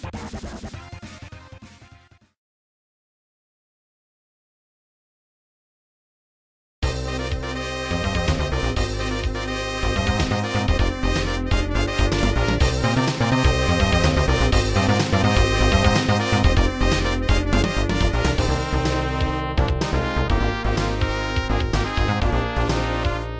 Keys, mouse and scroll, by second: 0.2 right click, 0.4 shift+right click, 0.6 g, 1.0 z, 1.9 click, 2.4 ctrl+s, 2.5 click, 2.7 click, 2.9 a, 3.7 KP_0, 5.5 ctrl+s, 5.8 click, 7.3 click, 7.8 click, 21.4 click.